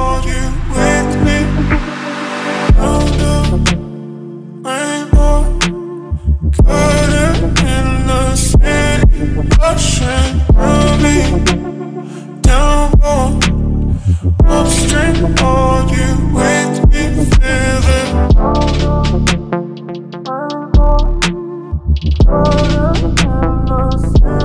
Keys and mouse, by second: 0.5 click, 2.0 middle click, 2.4 shift+z, 2.8 middle click, 5.9-7.4 drag, 7.8 click, 9.4 click, 10.0 Tab, 10.5 2, 11.2 shift+middle click, 12.3 middle click, 12.6 ctrl+middle click, 13.0 middle click, 14.3 middle click, 14.8 shift+click, 15.1 ctrl+middle click, 16.0 Tab, 16.7 Tab, 17.4 click, 19.7 ctrl+s, 24.1 middle click.